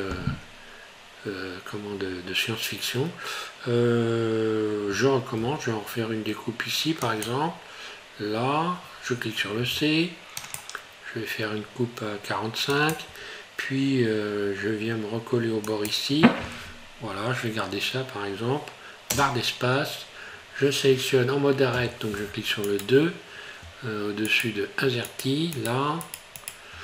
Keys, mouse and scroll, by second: 22.6 right click, 24.3 shift+right click, 25.5 right click.